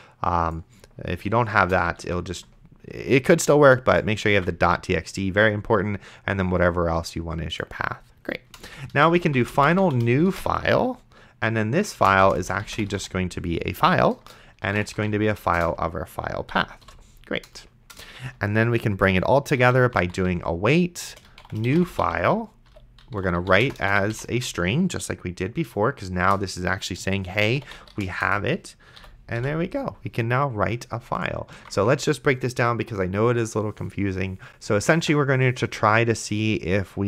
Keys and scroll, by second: 2.3 ctrl+s, 4.6 ctrl+s, 8.6 Return, 8.7-10.4 typing, 11.9-15.6 typing, 14.2 Return, 16.5 End, 16.8 ;, 17.9 Return, 19.5-24.8 typing, 26.2 Return, 27.2-29.4 typing, 29.0 End, 31.8 ctrl+s.